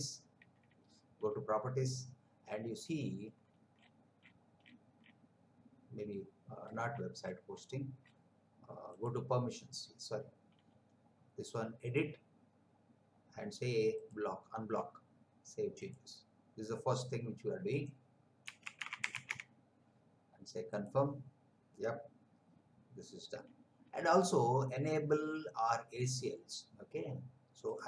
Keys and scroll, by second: 18.4-19.3 typing.